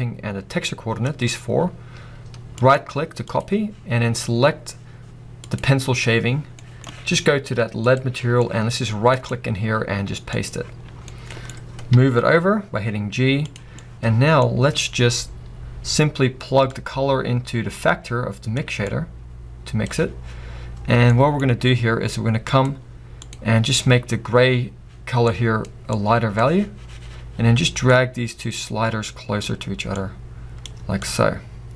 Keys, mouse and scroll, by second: 4.4-5.6 right drag, 4.4 scroll down 1, 5.6 click, 7.8 click, 10.5-12.5 right drag, 12.5 g, 18.6 click, 24.4 drag, 28.0-29.2 drag, 31.5-31.7 drag.